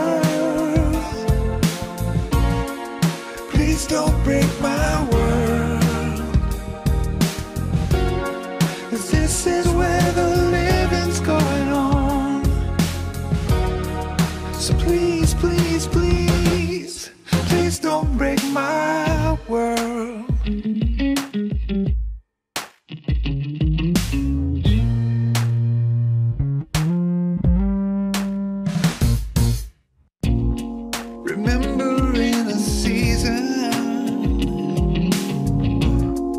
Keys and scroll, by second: 0.0 Return, 1.6 Tab, 3.9 Tab, 4.6 Tab, 5.6 Tab, 7.4 Tab, 9.9 Tab, 12.7 Tab, 13.2 Escape, 14.3 ctrl+shift+s, 20.4 ctrl+t, 22.5 alt+Up, 25.0 alt+Up, 25.1 F12, 28.1 alt+Insert, 33.5 Tab.